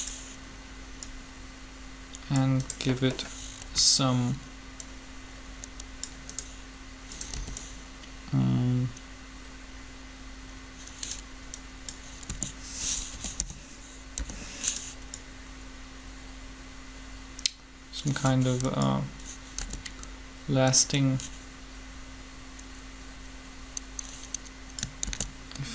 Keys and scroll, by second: 3.6 b, 7.3 b, 12.3-14.1 typing, 19.5 g, 25.0 shift+d.